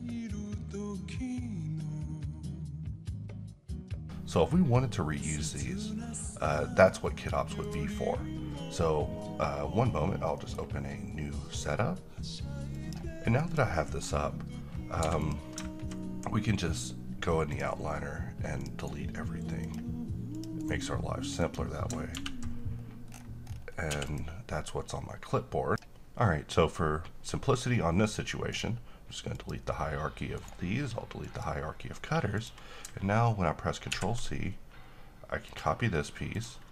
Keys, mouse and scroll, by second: 4.0 scroll up 1, 4.3-7.4 middle drag, 7.2 scroll down 1, 7.6 click, 10.4 middle click, 12.8-14.9 drag, 14.9 x, 15.1 click, 16.3-17.4 scroll down 1, 17.4 click, 18.7 right click, 19.5 click, 20.5 right click, 21.3 click, 22.0 ctrl+v, 22.7-23.0 scroll down 1, 23.4-23.8 scroll up 1, 23.8 x, 24.0 click, 25.9 ctrl+z, 29.5 click, 30.5 right click, 31.4 click, 34.1 ctrl+c, 35.6 click.